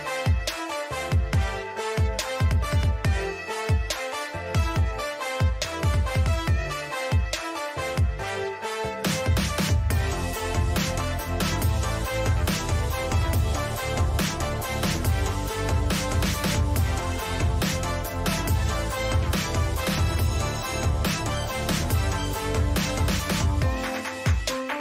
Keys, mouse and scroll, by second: 6.2-7.3 middle drag, 7.3-9.2 right drag, 7.9-9.0 drag, 9.2 middle click, 11.8-13.0 middle drag, 13.0 KP_3, 14.9 g, 17.8-23.1 middle drag.